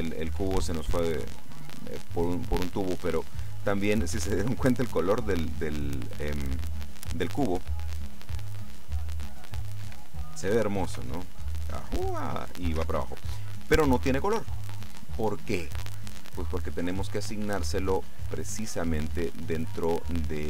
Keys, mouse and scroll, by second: 0.4 Escape, 7.7 p, 9.9 Escape, 11.0 p, 12.9 Escape, 17.1 click, 18.9-20.4 middle drag.